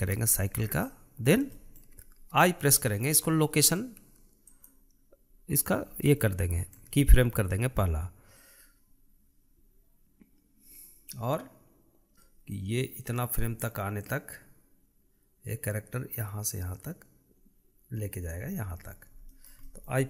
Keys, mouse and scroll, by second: 1.2 click, 1.9-3.0 shift+middle drag, 6.5-9.0 shift+middle drag, 9.0-11.9 drag, 12.1-13.0 shift+middle drag, 13.0 click, 19.2-19.8 scroll down 1, 19.8-20.0 shift+middle drag.